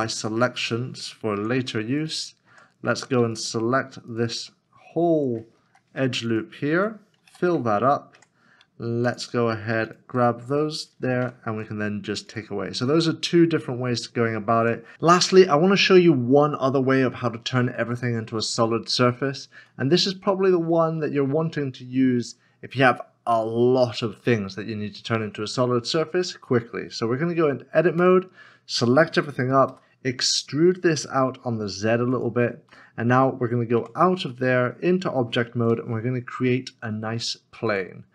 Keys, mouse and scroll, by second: 1.3 Tab, 3.3 alt+click, 4.1 alt+click, 5.6 2, 6.3 alt+l, 6.5 alt+click, 7.3 f, 8.1 Tab, 9.9 shift+click, 10.9 ctrl+s, 14.6 Tab, 19.7 middle click, 28.0 a, 29.7 e, 31.0 z, 32.8 middle click, 35.5 shift+a.